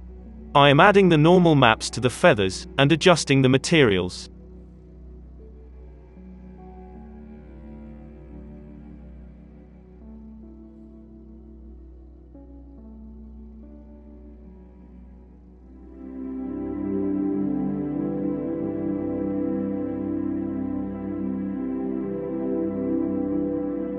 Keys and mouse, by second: 1.0 alt+a, 1.4 shift+d, 4.6 shift+a, 7.5-10.0 middle drag, 10.0 KP_Divide, 10.0 click, 10.0 n, 10.3-11.3 middle drag, 10.3 z, 11.3-17.5 drag, 17.5 alt+a, 23.4-23.9 drag.